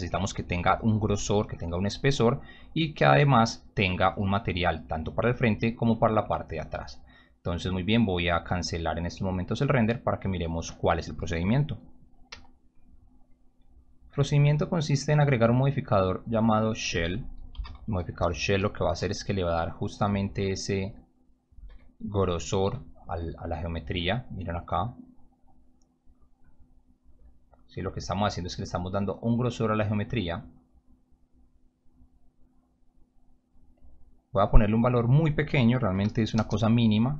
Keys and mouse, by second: 13.1 click, 15.8 click, 17.2-18.1 typing, 18.8 Return, 19.6-20.5 typing, 25.1-26.4 drag, 32.1-33.9 drag, 34.7 click, 35.7-36.5 typing.